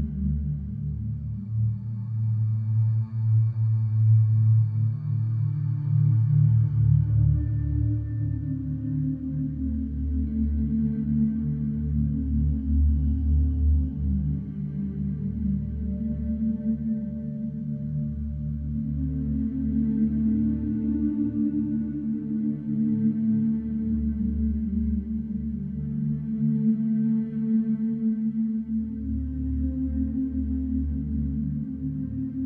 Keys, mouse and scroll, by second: 0.3 click, 3.9 click, 8.3 click, 9.9 click, 11.9 click, 14.1 click, 15.8 3, 16.3 6, 18.7 click, 19.8 BackSpace, 20.2 KP_6, 21.0 click, 22.9 click, 24.0 click, 27.2 click, 28.4 click, 30.0 click, 31.6 click.